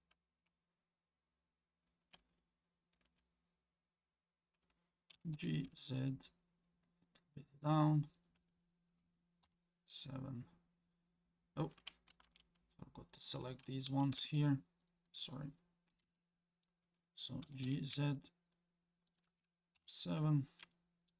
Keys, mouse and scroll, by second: 5.1 g, 9.4 KP_7, 10.4-10.7 scroll up 3, 12.2 ctrl+z, 14.4 shift+click, 14.8 shift+click, 15.3 middle click, 16.1 shift+middle click, 17.4 g, 19.8 KP_7, 20.7 shift+middle click.